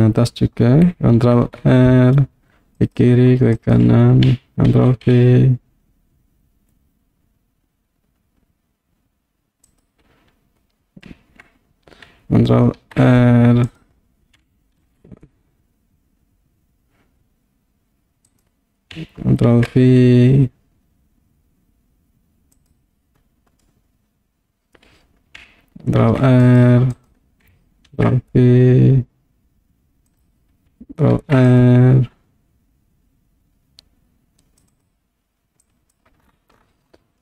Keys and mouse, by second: 1.4 ctrl+r, 3.6 right click, 4.8 ctrl+b, 9.7 click, 12.8 ctrl+r, 14.8 ctrl+b, 18.3 right click, 19.5 ctrl+b, 22.6 click, 23.6-24.8 middle drag, 26.0 ctrl+r, 27.0 right click, 28.0 ctrl+b, 30.2 click, 31.2 ctrl+r, 34.7 click, 35.6 click.